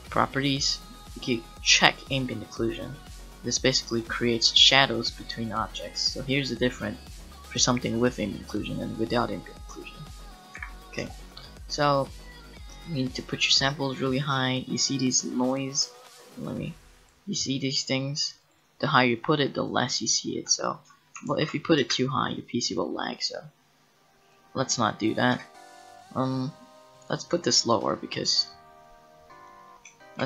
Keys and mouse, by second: 2.2-3.6 drag, 3.6-6.1 middle drag, 9.7 middle click, 10.6 a, 12.6-16.1 drag, 16.1 middle click, 16.4-25.4 drag, 25.4 right click, 25.4 n, 25.5 click, 25.9-27.5 middle drag, 28.4 click, 28.8-30.2 middle drag.